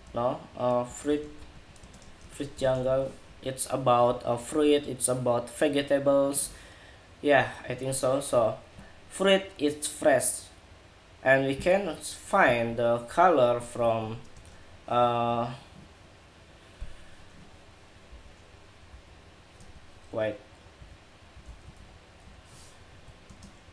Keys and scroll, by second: 2.9 Escape.